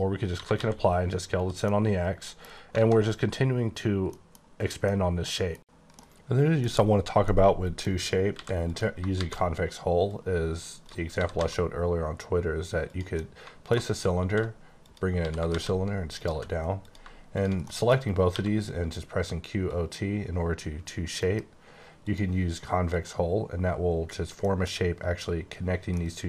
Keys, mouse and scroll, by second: 0.4 typing, 1.4 click, 1.7 middle click, 2.6 scroll down 1, 2.8 alt+a, 4.1 middle click, 4.8 middle click, 7.3 middle click, 8.1 scroll down 1, 8.3 x, 8.6 click, 9.1 shift+a, 10.0 click, 11.1 typing, 12.8 click, 13.1 middle click, 13.7 alt+scroll down 3, 14.1 shift+d, 14.8 click, 15.1 s, 15.5 shift+z, 16.2 click, 16.2 g, 16.8 click, 17.6 middle click, 18.0 scroll up 3, 18.3 q, 19.6 click, 21.2 F9, 22.0 click, 22.9 click, 24.4 middle click, 25.9 middle click.